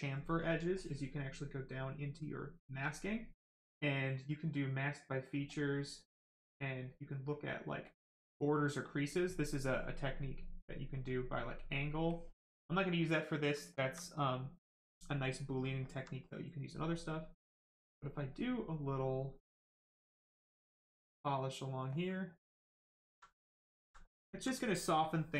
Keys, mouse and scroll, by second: 0.2 click, 5.2 click, 7.8 click, 12.0 click, 13.3 right click, 13.8 alt+right click, 14.4 right click, 14.5 right click, 15.8 alt+right click, 20.0 click, 22.3 right click, 23.0 alt+right click, 24.0 right click, 24.0 right click, 24.3 alt+right click.